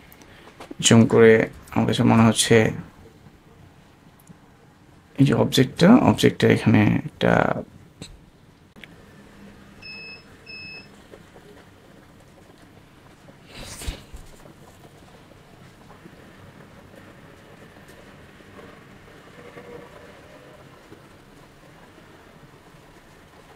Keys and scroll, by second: 1.7 shift+super+space.